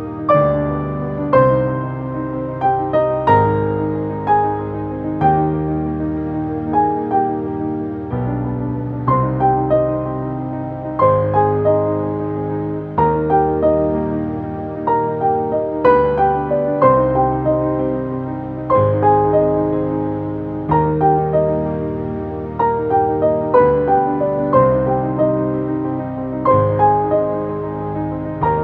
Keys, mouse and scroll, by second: 1.5 6, 2.1 Return, 3.7 click, 5.3 7, 5.9 Return, 7.7-13.4 alt+drag, 15.9 typing, 16.4 Return, 17.2 click, 18.7 typing, 21.1 click, 24.7 Up, 26.3 click, 28.2 Up.